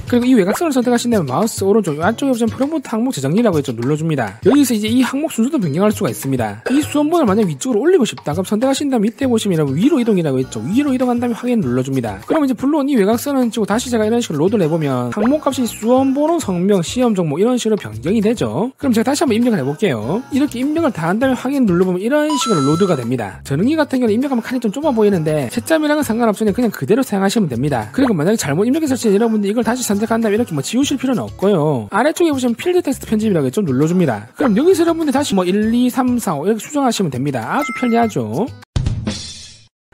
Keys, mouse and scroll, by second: 1.2 click, 1.5 right click, 4.3 click, 9.0 click, 11.5 click, 12.1 click, 13.0 click, 13.1 right click, 14.0 click, 14.7 click, 14.9 click, 22.2 click, 30.3 click, 30.7 click, 31.0 right click, 34.3 click, 35.4 click, 35.5-37.1 typing, 37.2 click, 37.7 click.